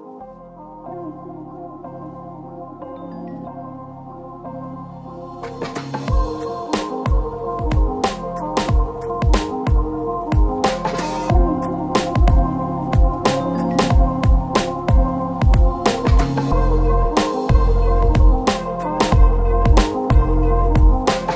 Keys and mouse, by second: 0.4 shift+middle click, 0.6 shift+middle click, 1.1 shift+middle click, 1.5 KP_Divide, 1.5 KP_1, 1.5 KP_3, 1.7 shift+middle click, 2.7 shift+middle click, 2.9 Tab, 2.9 shift+z, 3.0 shift+middle click, 3.2 b, 3.9 a, 4.1 b, 5.6 shift+middle click, 5.7-9.6 typing, 6.7 Tab, 6.8 click, 8.1 Tab, 8.2 shift+middle click, 8.9 shift+middle click, 9.8 ctrl+click, 10.2 shift+click, 10.4 ctrl+j, 10.6 ctrl+click, 10.6 q, 11.1 middle click, 11.2 shift+click, 11.4 a, 11.6 click, 12.1 shift+click, 12.4 q, 12.8 shift+click, 13.8 shift+Tab, 13.8 shift+click, 14.8-16.7 typing, 15.2 Tab, 15.8 Tab, 16.5 shift+click, 17.4 Tab, 17.4 ctrl+x, 17.6 ctrl+x, 17.8 ctrl+x, 18.2 Tab, 18.9 shift+middle click, 19.6 KP_1, 19.8 shift+middle click, 20.0 shift+d, 20.1 shift+middle click, 20.3 shift+middle click, 20.3 shift+d, 20.8 shift+middle click, 20.9 middle click.